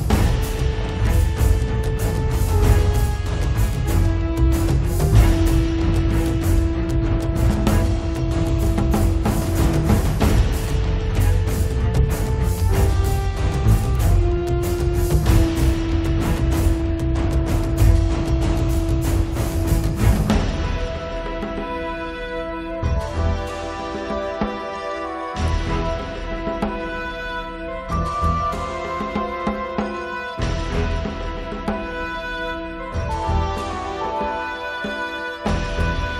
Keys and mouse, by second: 0.1-4.1 drag, 0.1-2.1 right drag, 4.1 middle click, 4.1 click, 4.1 right click, 4.6-8.1 middle drag, 8.1 click, 8.8-13.5 middle drag, 11.7-15.2 drag, 13.8 middle click, 15.2 middle click, 15.4 click, 16.3 middle click, 16.6-17.7 drag, 17.5-18.7 middle drag, 19.1-23.0 drag, 23.0-24.9 middle drag, 24.9-26.6 drag, 26.6-28.2 middle drag, 27.0 click, 27.4 right click, 28.2 click, 28.6 shift+f, 29.6 shift+f, 30.0 middle click, 30.2 click, 30.9 shift+f, 31.5 click, 32.1 middle click, 32.2-34.1 drag, 34.1 middle click, 34.4-35.7 drag, 34.4-35.7 right drag, 35.7 right click, 35.9 click, 35.9 right click.